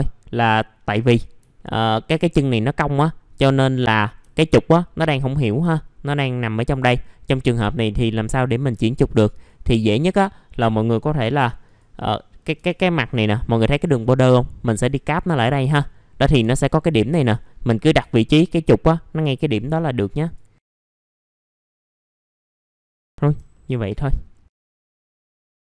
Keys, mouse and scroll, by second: 1.2 scroll up 1, 1.5 alt+middle click, 1.8 alt+middle click, 4.2 alt+middle click, 8.5 click, 8.8 alt+middle click, 9.3 click, 10.2-11.6 scroll up 1, 11.6 click, 12.1 middle click, 12.4-12.8 scroll up 3, 13.1 click, 15.2 scroll down 1, 16.7 click, 17.4 middle click, 17.5-18.0 scroll down 1, 20.2 click, 21.2 middle click, 21.8 scroll down 1, 21.9 middle click, 22.0 scroll up 1, 22.3 click, 23.1 middle click, 23.2 scroll down 1, 23.5 alt+middle click, 24.1-24.7 scroll down 1, 24.7 click, 24.8 right click, 25.1 click, 25.2-25.7 scroll down 2.